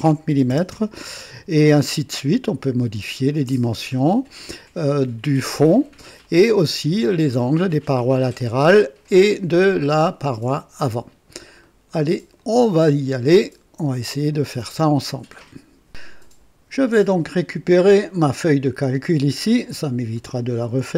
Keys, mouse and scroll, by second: 0.3-2.3 typing, 2.2 click, 2.9 click, 3.6-4.5 typing, 4.3-5.8 drag, 5.8-6.7 typing, 6.2-7.1 drag, 8.4-9.4 drag, 9.7 click, 9.7-10.4 typing, 10.9 click, 11.6 right click, 12.4 click, 13.4 right click, 14.0 typing, 14.3 click, 15.0 right click, 17.1-17.8 scroll up 2, 17.9 scroll down 2, 19.7 click.